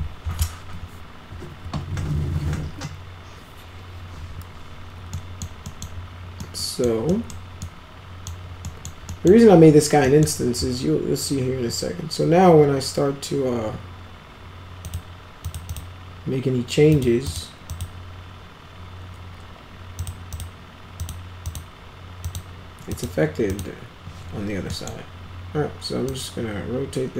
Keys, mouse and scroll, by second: 5.0 middle click, 5.6 middle click, 6.3 middle click, 7.0 middle click, 7.6-8.2 middle drag, 8.6 middle click, 9.0 middle click, 10.0 middle drag, 14.8 click, 15.4 click, 15.6 click, 16.8 click, 17.2 click, 17.6 click, 19.9 click, 20.3 click, 20.9 click, 21.4 click, 22.2 click, 22.8 click, 23.4 click, 24.6 middle click, 26.0-27.1 drag.